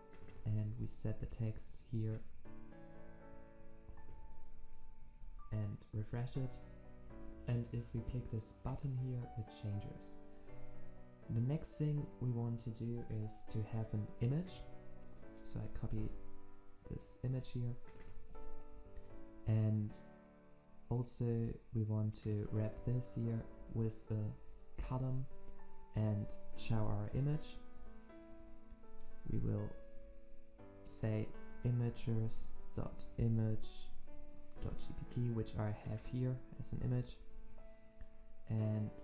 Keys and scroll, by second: 0.6 ctrl+c, 4.1 ctrl+v, 5.3 ctrl+s, 15.7 ctrl+v, 18.3 ctrl+c, 22.7 alt+Return, 26.5 ctrl+v, 37.1 ctrl+alt+Left.